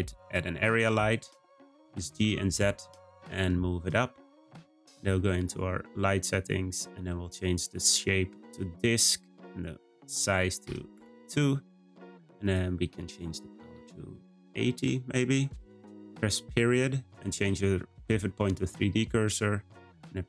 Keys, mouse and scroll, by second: 0.4-1.3 scroll down 1, 1.8 g, 5.3 click, 7.2-12.1 drag, 12.4-15.4 drag, 16.4 ..